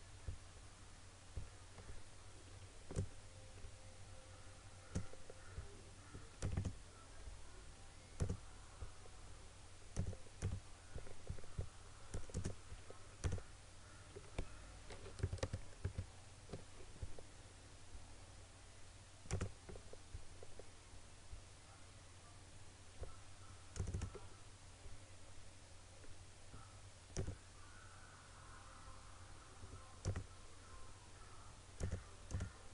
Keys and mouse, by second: 15.3 ctrl+=, 19.4 click, 23.9 click, 27.3 click, 30.1 click.